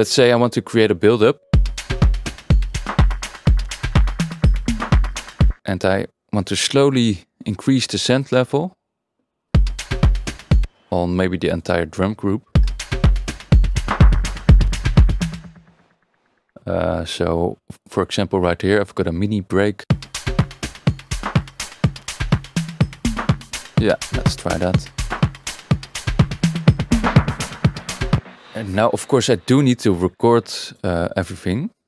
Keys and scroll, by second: 1.5 space, 5.5 space, 9.5 space, 10.6 space, 12.5 space, 15.2 Tab, 15.4 space, 19.8 space, 28.1 space.